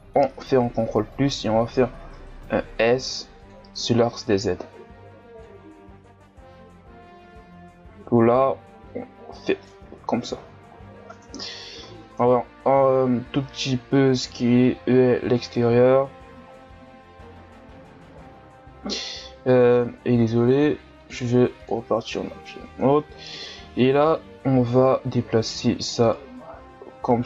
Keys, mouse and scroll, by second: 1.3 s, 4.2-6.0 drag, 6.0 s, 9.7 Tab, 10.1 scroll down 4, 10.7-11.2 scroll up 3, 11.2 Tab, 11.8 s, 15.9 Tab, 16.5 scroll down 2, 17.2-19.1 scroll up 3, 19.1 ctrl+Tab, 19.7 Tab, 21.0-22.2 drag, 22.2 Tab, 24.2 right click, 26.1 right click.